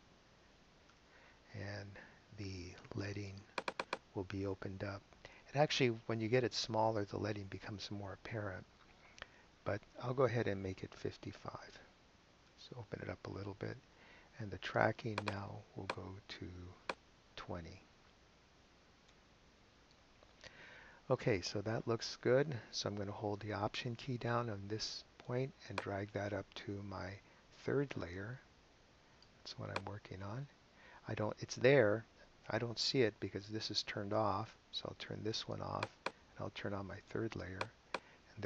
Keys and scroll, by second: 0.0-0.2 typing, 1.3 Return, 11.6 5, 12.9 Return, 18.5-19.4 typing, 19.5 Return.